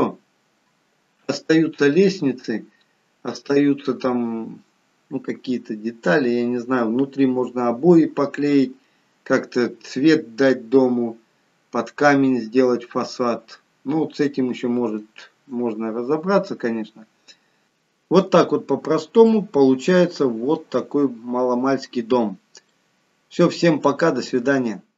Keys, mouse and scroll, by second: 17.6 middle click.